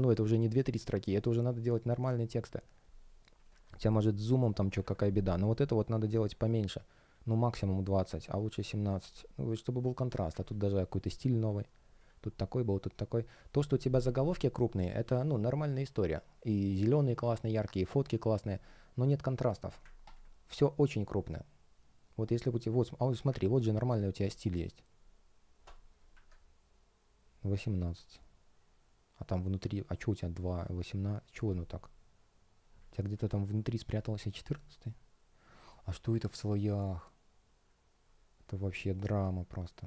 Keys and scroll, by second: 3.4 super+\, 4.7 super+\, 26.0 super+\.